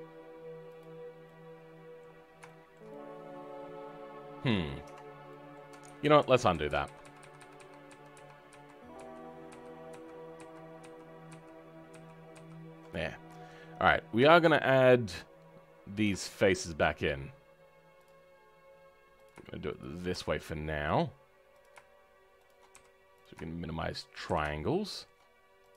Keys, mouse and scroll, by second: 0.9 scroll down 3, 1.2 middle click, 1.8 middle click, 2.1 scroll up 4, 2.4-4.7 shift+middle drag, 4.7 Tab, 4.9 scroll down 2, 5.2 middle click, 5.8 ctrl+z, 5.9-10.3 ctrl+z, 10.7 ctrl+z, 11.2 ctrl+z, 13.2 middle click, 13.9-14.2 scroll up 5, 14.2 shift+middle click, 14.9-15.9 right drag, 15.9 click, 18.0-19.7 drag, 20.0 f, 21.5 click, 22.6 f, 23.1 click, 24.2 f, 24.5-25.6 right drag, 24.5 shift+middle click, 25.6 click.